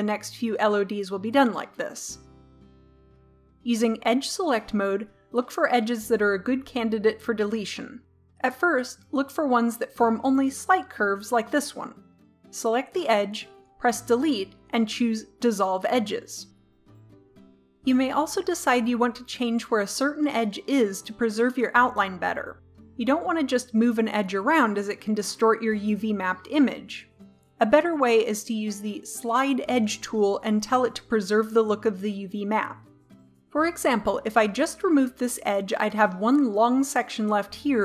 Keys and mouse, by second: 2.9 click, 3.8-5.9 middle drag, 5.6 click, 6.4-8.5 middle drag, 8.5-11.8 drag, 11.8-13.6 right drag, 13.7 Delete, 21.8-25.0 right drag, 23.4 g, 32.7-34.4 right drag, 34.4 Delete.